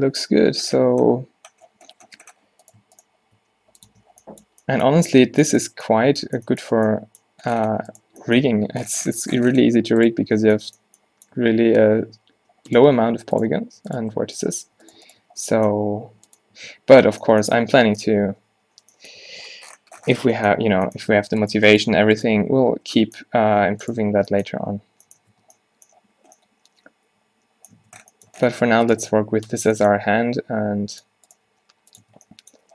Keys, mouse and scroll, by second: 0.4 o, 1.1 g, 3.4 g, 4.0 Tab, 6.8 Tab, 8.6 g, 10.3 Tab, 11.5 Tab, 12.5 g, 13.2 z, 13.4-14.8 drag, 15.4 z, 15.8 g, 16.6 Tab, 18.1 space, 19.3 a, 20.8 Tab, 22.5 q, 23.0 Tab, 23.5 Tab, 24.1 alt+q, 24.7 q, 25.4 Tab, 27.9 Tab, 29.1 q, 29.4 q, 29.7 Tab, 30.3 Tab, 30.4 g, 31.6 g, 32.1 Tab.